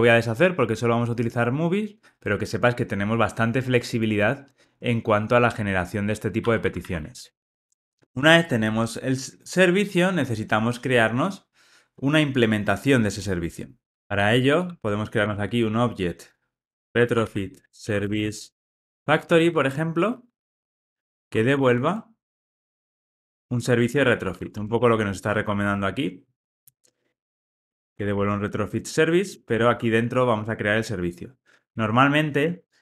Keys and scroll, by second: 6.4 super+z, 6.9 super+z, 15.2 Return, 30.4 Return, 32.3 Escape.